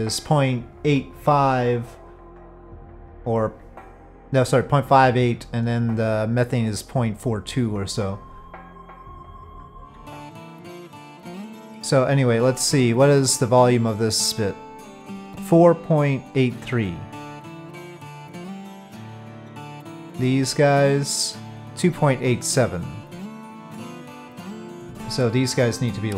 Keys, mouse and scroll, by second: 14.5 click, 19.6 click, 20.7 click, 25.9 middle click.